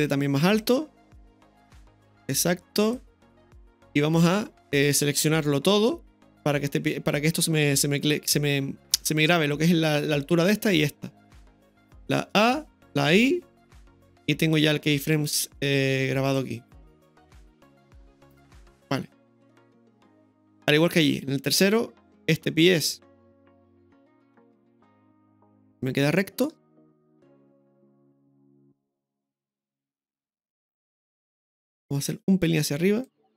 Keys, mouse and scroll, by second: 2.3 click, 16.4-24.3 drag, 24.3 KP_3, 25.8-26.2 scroll up 2, 26.2-26.5 shift+middle drag, 28.9 right click, 30.1-31.0 drag, 32.0 right click, 33.1-33.3 drag.